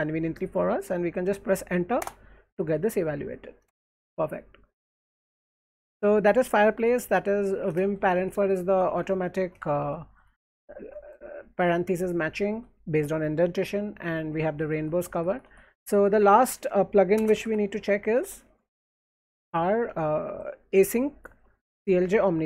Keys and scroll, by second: 2.0 Return, 3.6 Return, 7.0-9.8 typing, 9.4 shift+Tab, 10.1 Tab, 10.7 shift+Tab, 12.1 j, 12.3 j, 12.5 j, 14.2-18.2 typing, 19.7 alt+1, 19.9 alt+1, 21.0 j, 21.4 j.